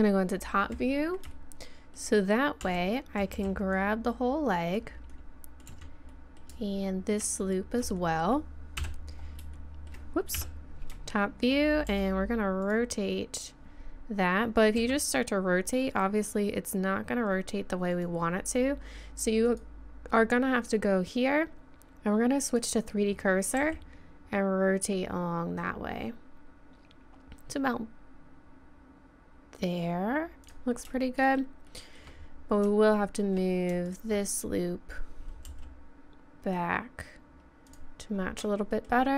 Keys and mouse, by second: 0.5-1.6 middle drag, 1.7 middle click, 2.6 z, 3.3 b, 5.1 middle click, 5.7 z, 7.7 click, 8.8 KP_7, 8.9 KP_4, 10.3 KP_7, 11.9 r, 14.8 r, 20.2-21.5 drag, 23.6 r, 31.1-32.5 middle drag, 32.5 middle click, 32.7 middle click, 34.0-35.4 drag, 35.5 g, 38.1 middle click.